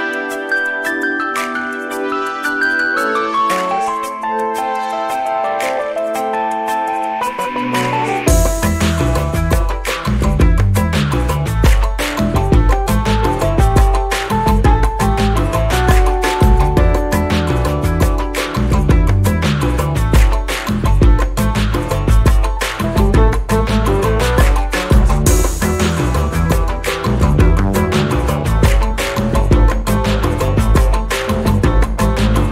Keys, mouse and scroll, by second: 0.3 click, 1.5-4.0 shift+drag, 4.4 shift+click, 6.8 ctrl+KP_Subtract, 8.3 ctrl+shift+k, 10.8 click, 11.7 click, 13.4 click, 15.4 shift+click, 16.6 click, 17.9 click, 19.2 click, 21.4 shift+click, 24.4 click, 26.9 click, 28.7-29.6 shift+drag, 30.6 ctrl+g, 32.0 KP_5.